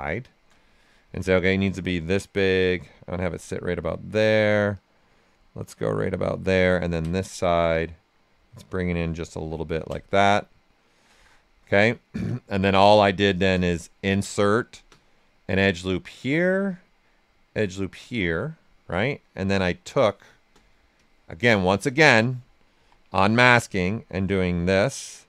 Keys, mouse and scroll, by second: 1.5-3.4 drag, 3.4-4.7 right drag, 4.7-6.6 drag, 6.6 ctrl+click, 7.7-9.3 drag, 9.3 q, 9.7 ctrl+click, 10.1 right click, 11.2 alt+right click, 12.5 ctrl+q, 13.5 ctrl+space, 14.3 ctrl+click, 15.5-16.9 ctrl+drag, 16.9-18.9 ctrl+drag, 18.9 ctrl+click, 19.8 ctrl+space, 22.7 w, 23.7-25.2 drag.